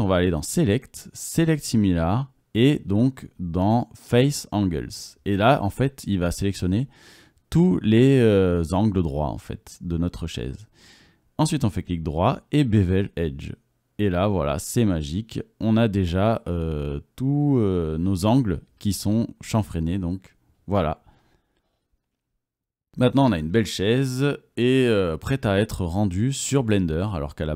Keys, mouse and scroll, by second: 6.6 middle click, 7.2 middle click, 7.9 middle click, 13.3-14.5 middle drag, 15.7 typing, 16.2 Tab, 16.2-17.9 drag, 17.7 middle drag, 17.9 middle drag, 18.1-18.4 middle drag, 18.5-19.1 middle drag, 20.1 click, 20.4 click, 21.0 click, 21.1 Tab, 21.4-22.5 drag, 21.4 middle click, 21.4 right click, 21.6 middle click, 21.6 right click, 22.5 middle click, 22.7 click, 22.9 click, 23.1 right click, 23.6 right click, 24.0 right click, 24.8 right click, 25.2 right click, 25.4 right click, 25.7 Tab, 26.3 click, 26.3 middle click, 26.3-27.2 right drag.